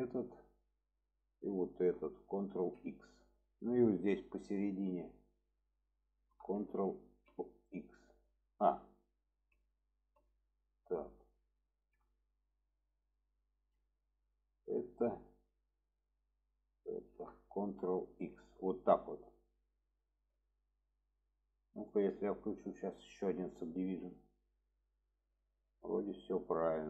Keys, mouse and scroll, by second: 1.4 alt+shift+click, 3.3 middle click, 4.4 click, 10.6 middle click, 13.2 shift+click, 14.1 alt+shift+click, 19.1 click, 19.7-21.2 middle drag, 22.2-24.0 drag, 24.7-25.1 middle drag, 25.5-26.8 middle drag.